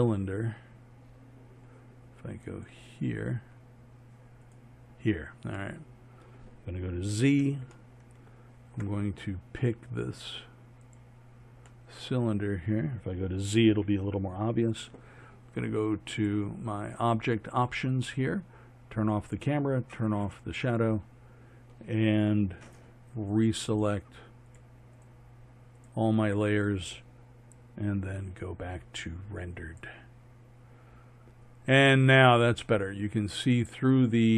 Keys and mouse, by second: 2.6-5.7 drag, 5.7-7.2 middle drag, 7.2 z, 11.9-13.1 middle drag, 13.8 z, 18.2-19.3 middle drag, 19.3-28.0 drag, 29.1-30.4 drag, 30.7 click.